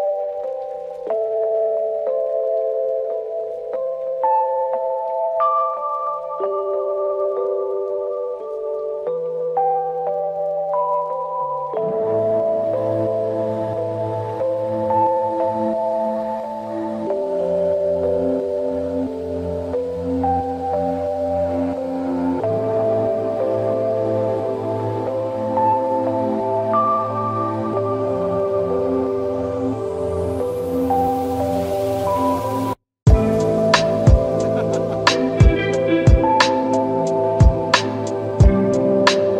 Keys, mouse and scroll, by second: 0.7-2.5 drag, 9.2 ctrl+z, 10.5 ctrl+z, 10.7-11.3 drag, 14.7-15.4 scroll down 1, 16.3 scroll down 1, 16.7-17.1 middle click, 17.2-18.3 drag, 21.2 click, 22.7 click, 27.1 click, 29.9 click, 30.4 click, 31.2 click, 31.9 click, 33.2 click, 35.0-35.4 drag.